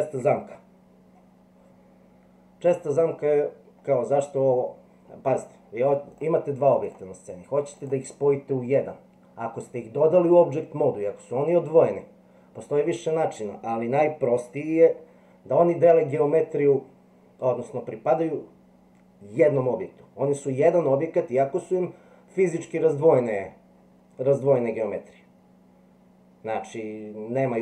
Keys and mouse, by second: 6.1 click, 7.8 click, 8.7 click.